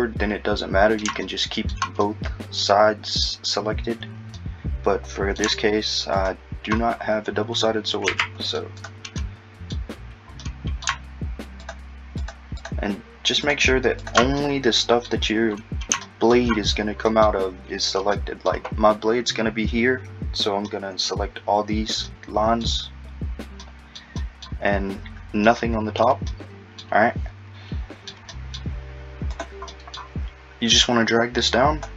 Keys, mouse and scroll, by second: 1.2 shift+middle click, 4.4 middle click, 6.2 shift+click, 7.0-8.1 scroll up 3, 8.1 c, 9.2 middle click, 10.4 middle click, 11.7 shift+click, 12.2 shift+click, 12.6 shift+click, 13.5 shift+click, 14.0 shift+click, 14.4 middle click, 15.6-16.0 scroll down 2, 16.0 shift+middle click, 16.7-17.1 scroll down 2, 17.1 middle click, 18.2 middle click, 20.7 middle click, 22.1 middle click, 23.6 middle click, 24.2 middle click, 25.5 middle click, 26.3 middle click, 27.5 middle click, 28.3 middle click, 29.3 click, 29.7 middle click, 30.9 click.